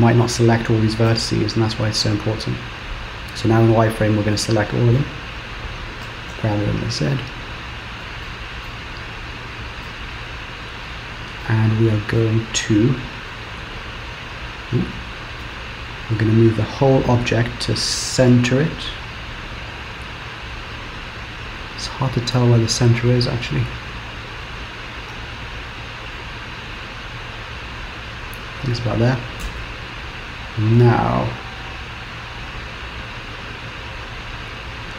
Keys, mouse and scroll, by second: 1.1 KP_3, 1.9 click, 3.8-4.1 scroll down 1, 4.4 shift+middle click, 5.1-6.1 scroll up 2, 6.1 g, 8.3 middle click, 9.0-9.9 scroll down 5, 9.9 KP_7, 10.4-11.3 scroll up 4, 11.5 shift+middle click, 13.3 g, 15.5 Tab, 17.8 g, 20.9-22.8 scroll up 1, 22.8-23.6 scroll down 3, 23.6 scroll up 3, 24.5 g, 29.5 Tab, 31.6 KP_3, 33.2 click.